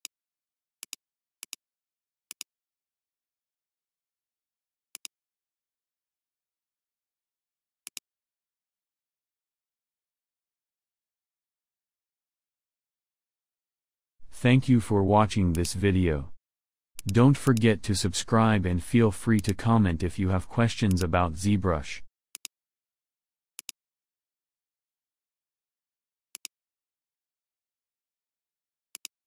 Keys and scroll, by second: 7.4 ctrl+z.